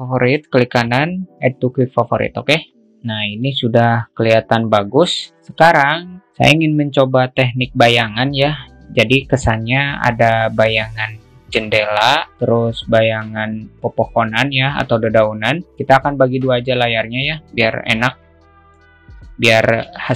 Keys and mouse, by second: 0.6-2.5 right drag, 3.9 click, 4.5-4.9 drag, 17.8-19.1 drag, 17.8 KP_0.